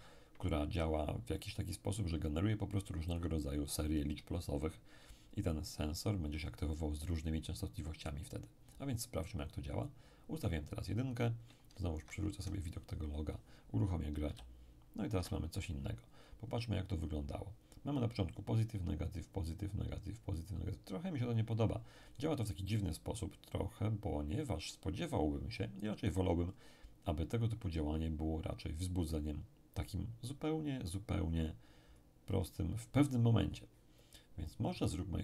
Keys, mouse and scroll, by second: 3.1 click, 11.9 alt+Tab, 14.2 p, 15.1 Escape, 16.4-18.0 scroll up 2, 23.4-25.2 scroll down 2, 26.5-27.7 scroll up 2, 27.7-29.6 scroll down 2, 31.9-32.9 scroll up 2, 34.5 click.